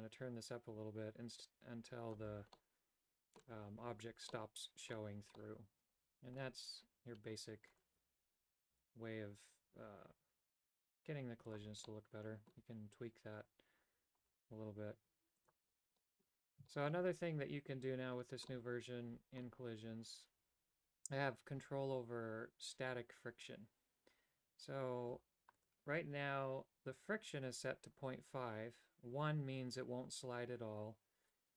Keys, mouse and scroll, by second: 2.7 middle click, 4.4 middle click, 5.5-6.5 middle drag, 7.9 right click, 9.0 r, 12.0 middle click, 14.4 right click, 15.5 click, 16.1 middle click, 16.9 shift+middle click, 18.7 middle click, 25.7 right click.